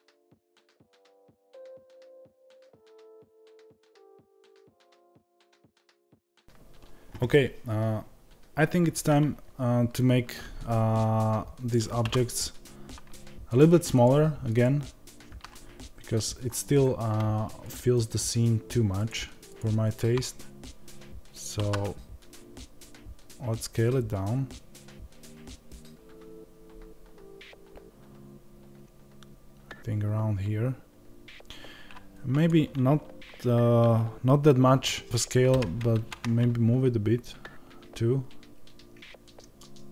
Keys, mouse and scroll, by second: 0.2 KP_Decimal, 0.5 middle click, 0.6 scroll down 2, 1.1 g, 1.4 click, 1.4-3.0 middle drag, 2.3 g, 3.0 click, 3.0-4.1 middle drag, 3.3 scroll down 1, 3.7 KP_0, 4.1 click, 5.1-6.4 middle drag, 5.4 scroll up 1, 5.7 KP_0, 6.4 click.